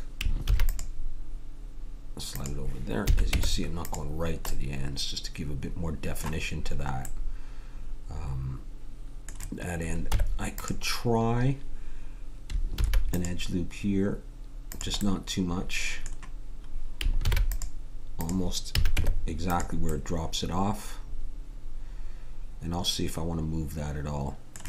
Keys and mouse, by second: 0.4 ctrl+r, 3.0 a, 3.3 Tab, 7.2-9.0 middle drag, 10.1 Tab, 12.7 ctrl+r, 15.0 click, 17.5 ctrl+r, 18.7 a, 18.9 Tab.